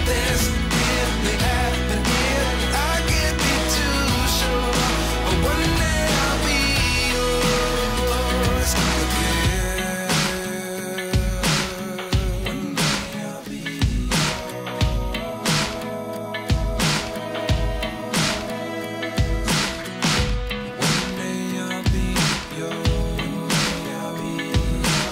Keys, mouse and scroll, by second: 1.6 click, 2.7 click, 3.2 g, 3.6 middle click, 4.1 click, 4.7 click, 5.3 click, 6.0 g, 6.2 middle click, 7.0 click, 8.5 right click, 10.7 click, 11.5 s, 12.0 g, 12.2 middle click, 12.6 click, 13.2 click, 13.7 g, 14.1 middle click, 15.4 right click, 16.5 right click, 18.0 click, 18.7 g, 18.9 click, 19.7 middle click, 20.5 middle click, 20.7 g, 20.9 click, 21.5 middle click.